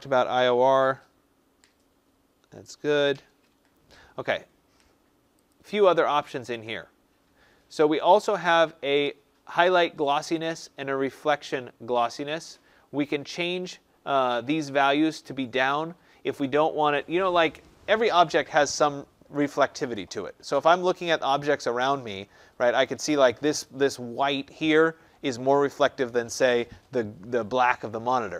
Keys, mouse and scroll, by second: 5.4 click.